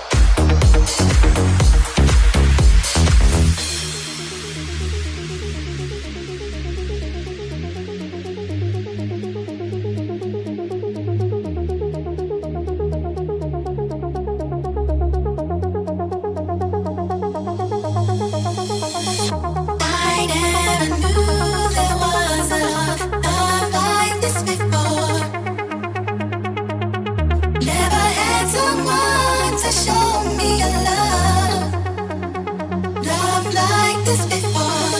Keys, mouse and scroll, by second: 18.0 k, 23.5 ctrl+z, 24.0 k.